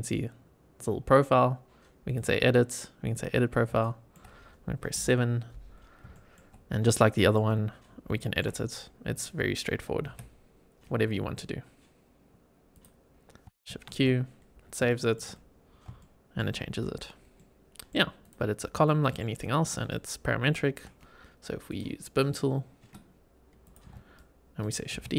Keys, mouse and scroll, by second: 2.0 click, 3.1 click, 3.7 shift+middle click, 4.8 KP_7, 5.6 scroll up 3, 6.1 shift+middle click, 6.5 scroll up 3, 6.8 shift+middle click, 7.7 scroll up 2, 8.1 shift+middle click, 9.0 click, 9.9 g, 12.6 click, 13.0 scroll down 2, 13.6 shift+q, 14.1-14.7 scroll down 4, 14.8 shift+middle click, 15.2-15.8 scroll up 4, 15.9-16.3 shift+middle drag, 17.0 scroll down 1, 17.3-17.8 middle drag, 18.1 click, 18.4 scroll down 2, 18.8 shift+middle drag, 19.3 shift+right click, 20.2 shift+e, 23.5 click, 24.1 shift+right click.